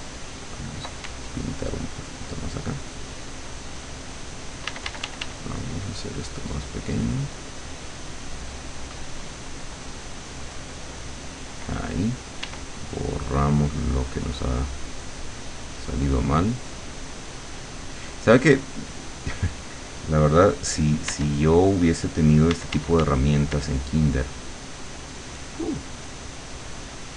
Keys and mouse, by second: 0.1 click, 1.7 ctrl+click, 4.7 d, 5.7-8.9 drag, 12.5 e, 12.9-15.1 drag, 15.3-16.7 drag, 16.8-19.5 drag, 21.1 w, 22.6 d, 24.1 click.